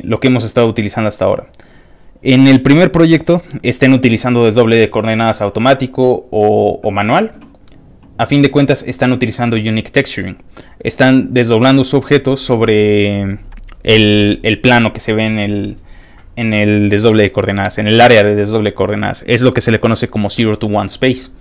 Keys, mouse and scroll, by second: 1.0 middle click, 1.0 scroll up 1, 3.0 click, 7.6 middle click, 7.6 scroll down 1.